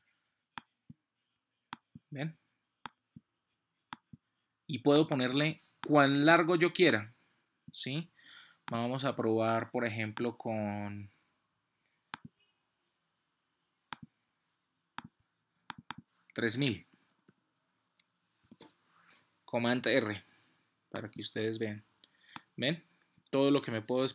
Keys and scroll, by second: 18.2 super+0, 18.4 super+r.